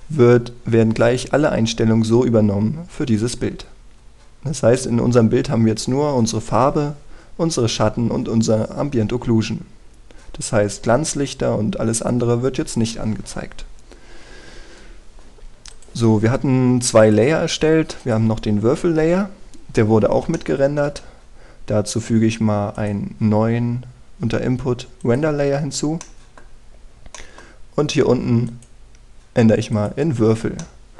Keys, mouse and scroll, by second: 4.0 middle click, 16.4 click, 21.0 middle click, 23.4 click, 26.3-26.7 scroll down 1, 26.7 middle click, 27.3 scroll up 1, 27.8 middle click, 28.3-29.1 scroll up 1, 29.1 click.